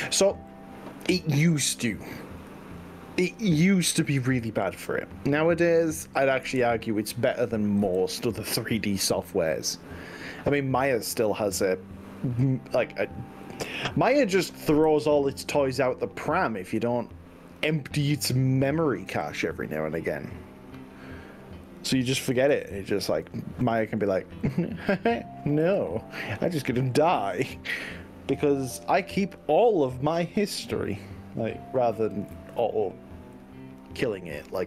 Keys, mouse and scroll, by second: 0.5 middle click, 1.5-4.3 middle drag, 4.3-5.7 drag, 6.5 KP_1, 7.8 KP_3, 8.5 z, 9.7-10.3 scroll up 3, 13.5-14.1 drag, 14.9 g, 17.5 drag, 18.1 click, 19.1 g, 21.7 click, 22.3 ctrl+z, 22.7 ctrl+z, 23.1 ctrl+z, 23.7 click, 24.5 click, 25.7 g, 26.5 scroll up 2, 26.9-28.2 scroll down 9, 28.9 scroll down 1, 30.1 scroll up 1, 30.7-31.1 scroll up 4, 31.9 scroll down 1, 32.3 click, 32.5 ctrl+z, 33.4-33.9 drag.